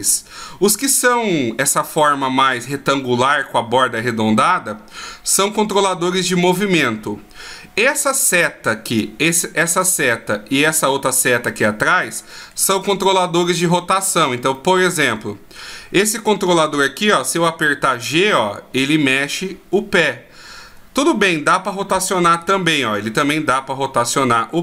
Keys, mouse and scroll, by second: 8.2 right click, 10.0 middle click, 11.6 right click, 12.1 middle click, 14.2 right click, 14.7 middle click, 16.8 g.